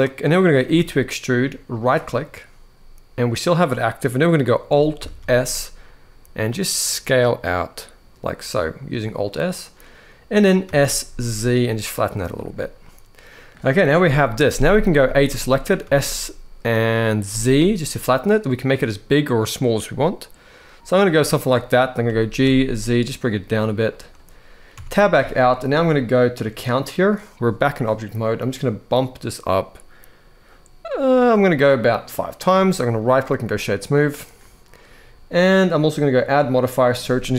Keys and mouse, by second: 0.4 e, 4.9 alt+s, 10.4 s, 10.8 z, 12.0 click, 12.6 middle click, 13.7 KP_1, 14.8 a, 15.1 shift+middle click, 15.5 s, 17.0 z, 20.7 click, 21.8 g, 22.2 z, 23.6 click, 24.5 Tab, 28.6 click, 32.7-33.3 right drag, 35.4 drag, 36.0-37.3 drag.